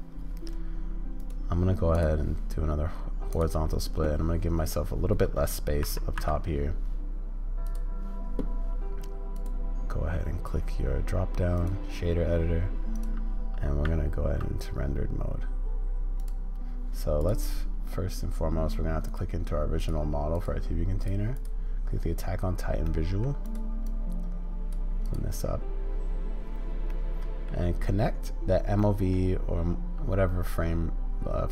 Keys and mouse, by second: 6.1 n, 9.2-14.4 middle drag.